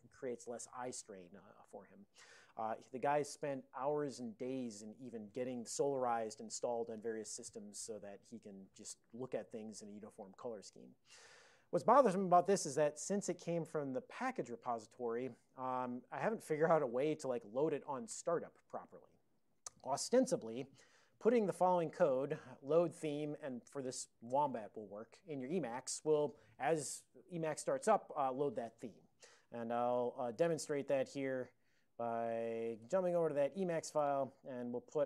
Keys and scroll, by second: 29.4 ctrl+a, 29.7 ctrl+f, 29.8 ctrl+f, 30.0 ctrl+space, 30.2 ctrl+e, 30.5 alt+w, 32.7-33.7 typing, 34.1 alt+<, 34.9 ctrl+n.